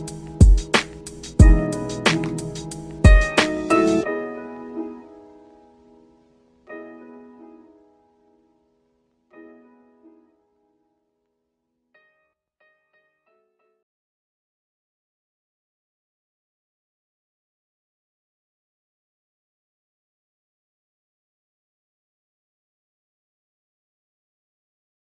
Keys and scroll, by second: 6.1 ctrl+z.